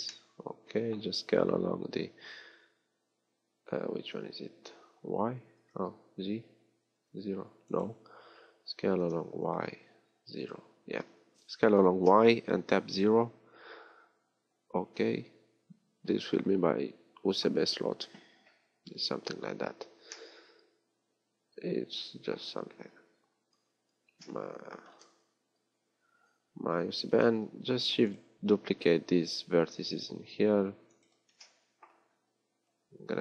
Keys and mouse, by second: 23.6-27.7 middle drag, 27.7 shift+d.